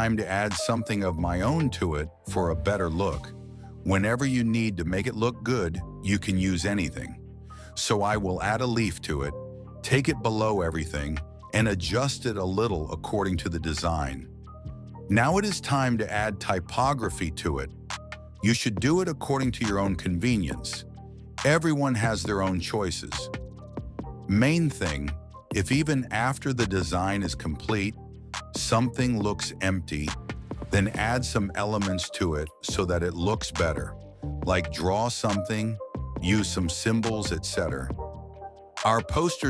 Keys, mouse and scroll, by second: 1.4 click, 2.3 click, 6.5 click, 7.7 click, 8.5-14.0 drag, 15.2 click, 16.9-18.0 drag, 18.3 ctrl+v, 20.0-23.4 drag, 24.7 click, 32.2 scroll up 2, 33.0 middle click, 35.6 alt+shift+click, 35.8 click, 36.1 click, 36.4 ctrl+z, 36.9 alt+shift+click, 37.2 click, 37.4 click, 37.7 click.